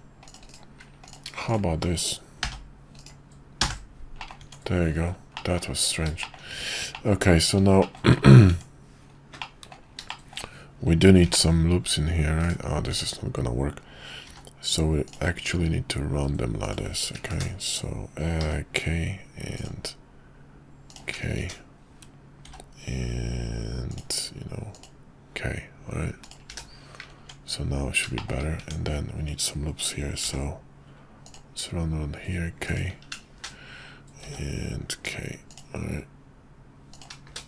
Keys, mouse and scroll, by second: 1.1 click, 2.4 k, 3.7 j, 4.2 middle click, 4.4 Tab, 5.3 middle drag, 6.2 shift+middle click, 6.9 middle click, 7.8 shift+middle click, 8.4 Tab, 9.4 middle click, 10.1 shift+middle click, 11.2 ctrl+r, 12.9 Tab, 14.2 k, 18.4 k, 22.4 k, 27.2 Tab, 28.1 shift+middle click, 30.2 k, 34.2 k.